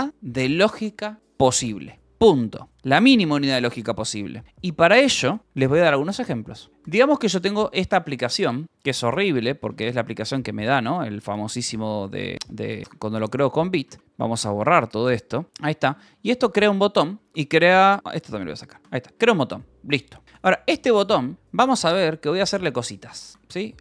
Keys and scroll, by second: 7.0-9.6 typing, 11.4-16.9 typing, 16.6 Escape, 17.8 Escape, 18.1-20.2 typing, 18.5 Escape, 21.3 h, 22.3 k, 23.7-23.8 typing.